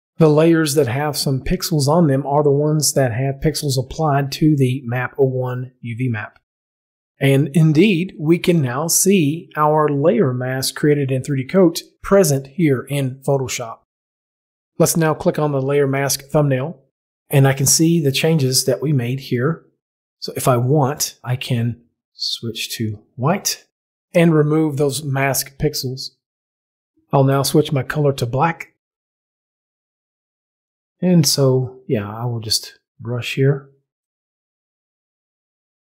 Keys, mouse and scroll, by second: 0.0 click, 0.1 click, 15.5 click, 21.5 click, 22.6 click, 26.4 click, 28.9-29.8 typing, 32.6 click.